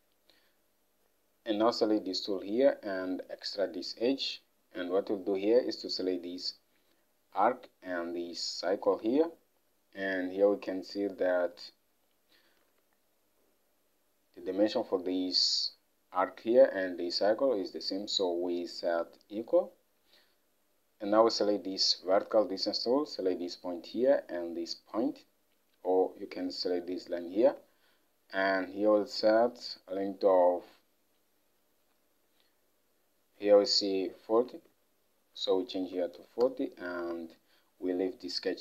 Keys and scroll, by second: 4.8 Escape, 9.0 alt+Tab, 27.5 alt+Tab, 34.6 alt+Tab, 36.0 typing, 36.5 Return.